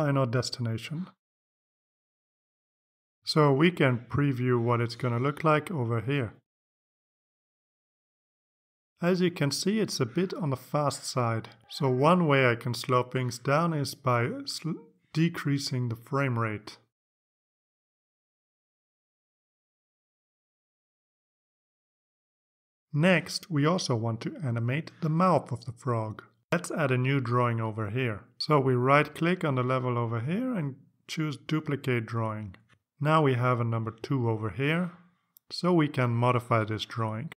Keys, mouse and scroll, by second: 2.1 click, 7.1 click, 8.4 click, 11.2 click, 13.8-16.1 drag, 16.5 click, 17.0 click, 17.9 click, 19.9 click, 23.0 click, 24.0-29.1 drag, 29.5 right click, 33.2 click, 34.4 click, 36.9 click.